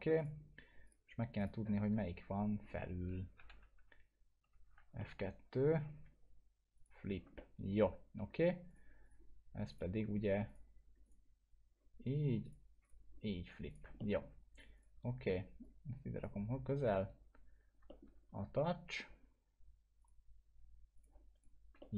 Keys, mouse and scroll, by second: 3.7 F2, 5.0-5.9 alt+middle drag, 6.7 click, 7.4-8.0 alt+middle drag, 8.7 click, 14.0 alt+middle click, 14.5 click, 15.6-16.2 click, 17.9 alt+middle click, 20.0 click, 21.8 alt+middle click.